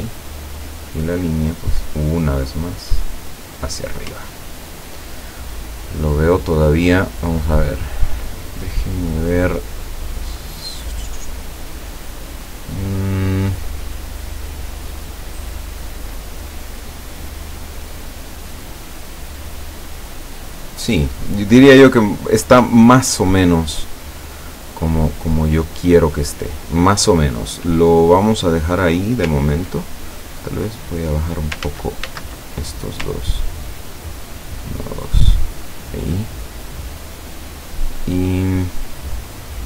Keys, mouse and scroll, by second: 0.2 click, 1.3-3.8 drag, 4.5 ctrl+scroll down 2, 5.5 ctrl+scroll up 2, 6.0 ctrl+scroll down 2, 6.7 ctrl+middle click, 7.6 ctrl+click, 9.1 click, 9.6 click, 28.4 click, 29.4 ctrl+click, 30.1 ctrl+click, 31.7 ctrl+z, 33.4-35.8 ctrl+drag, 37.5 click, 38.7 click, 39.3 click.